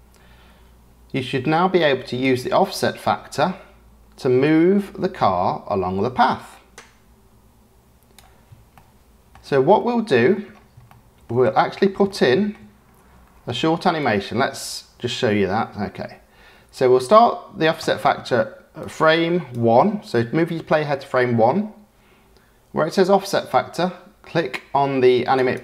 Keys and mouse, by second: 2.2-8.2 drag, 8.7-9.3 shift+middle drag, 9.7-10.1 shift+middle drag, 10.8-11.2 shift+middle drag, 12.0 shift+middle click, 14.0 click, 18.8 click, 25.3 click.